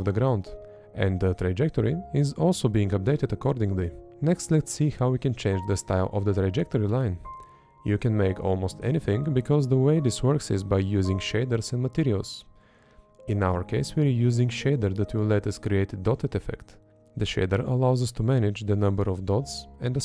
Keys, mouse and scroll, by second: 0.1 Up, 1.7 Left, 3.0 Up.